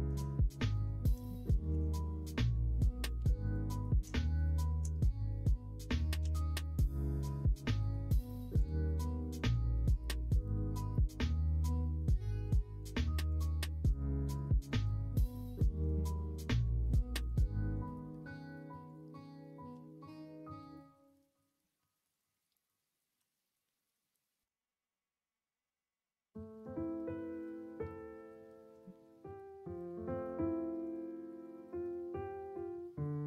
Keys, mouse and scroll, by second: 0.5 middle click, 1.4 shift+middle click, 2.1 click, 3.1 2, 3.4 click, 3.7 middle click, 4.3 click, 6.2 e, 11.6 e, 14.4 click, 15.2 shift+click, 16.1-17.8 drag, 19.7 f, 20.7 click, 21.7 1, 22.1 click, 23.1 g, 28.9 shift+middle click, 30.0 click, 30.8 click, 32.2 shift+click, 32.7 shift+click.